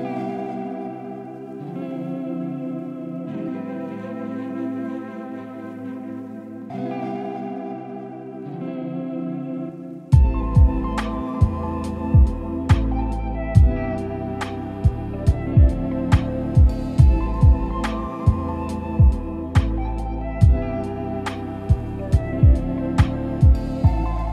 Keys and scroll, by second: 11.7 ctrl+z.